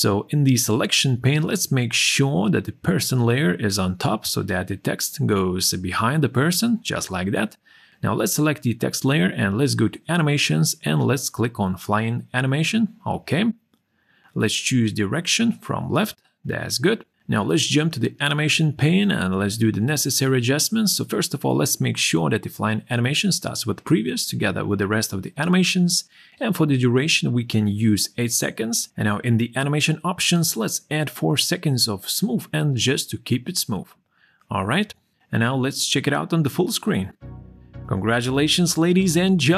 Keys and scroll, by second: 25.6 8, 25.8 Return, 31.1 4.